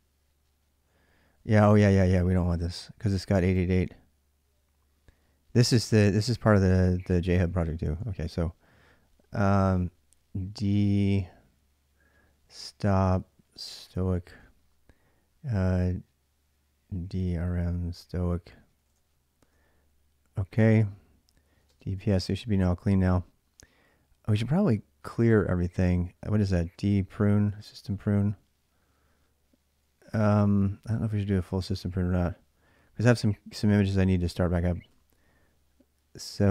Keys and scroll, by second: 8.6 s, 9.3 d, 9.4 space, 11.7-19.3 typing, 14.2 Return, 21.1-22.3 typing, 26.4-28.3 typing, 30.4 typing, 34.7 d.